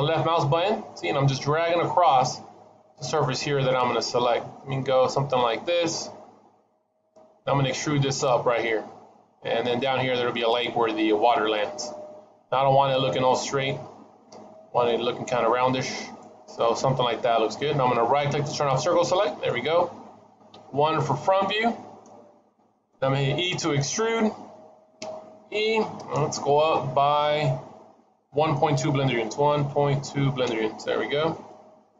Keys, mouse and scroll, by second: 20.4 KP_1, 23.9 e, 31.1-31.8 scroll down 3, 31.4 middle click.